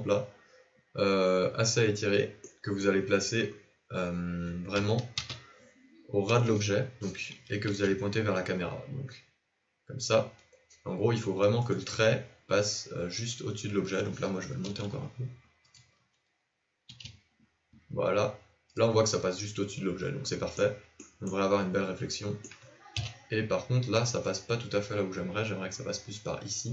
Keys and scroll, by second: 4.7 KP_1, 5.1 KP_3, 7.6 r, 14.5 g, 16.9 r, 22.9 KP_7.